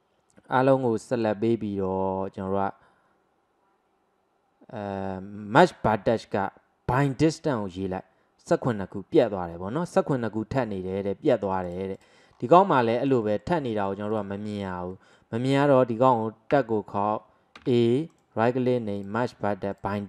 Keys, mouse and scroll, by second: 11.7-12.4 drag, 12.4-13.3 scroll down 6, 13.3-14.1 shift+middle drag, 14.1 click, 14.5-16.6 middle drag, 16.6 Tab, 17.6 a, 18.1-20.0 right drag.